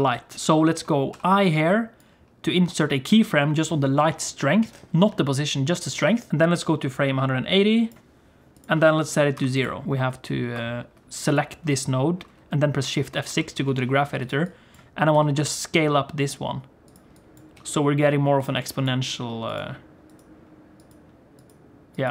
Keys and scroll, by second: 1.2 i, 9.8 shift+F3, 9.9 shift+F5, 10.5 shift+F3, 13.3 shift+F6, 15.1 s, 17.6 s, 19.2 s.